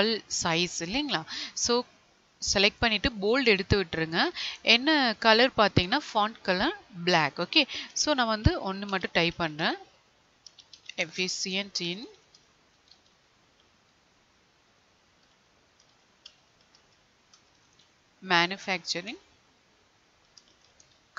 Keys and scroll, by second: 11.0 space, 11.3 space, 18.3 space.